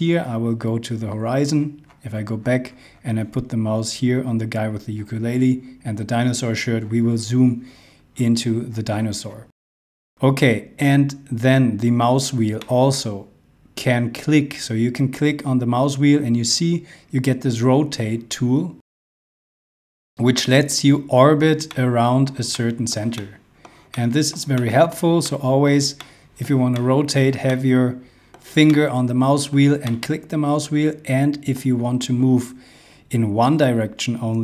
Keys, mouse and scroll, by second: 2.5 scroll down 1, 3.9-5.3 scroll up 1, 6.8 scroll down 1, 7.1 scroll, 7.2 scroll up 1, 8.1-8.6 scroll down 2, 9.3-11.9 scroll down 1, 12.6 middle click.